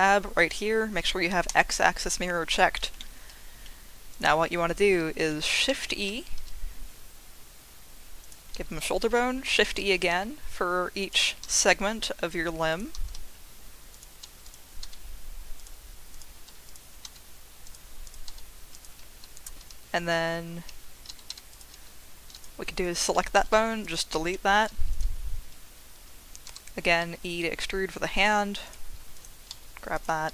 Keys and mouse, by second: 1.5 click, 3.0 shift+click, 4.1 click, 5.7 shift+e, 8.2 click, 9.5 shift+e, 11.0 click, 12.7 click, 13.1 shift+e, 13.9 click, 14.8 g, 15.6 click, 16.6 click, 17.0 g, 17.6 click, 18.7 click, 18.7 g, 19.6 3, 20.6 Escape, 21.3 g, 21.5 click, 23.4 Delete, 24.9 click, 26.4 e, 28.6 click, 29.5 g, 29.9 click.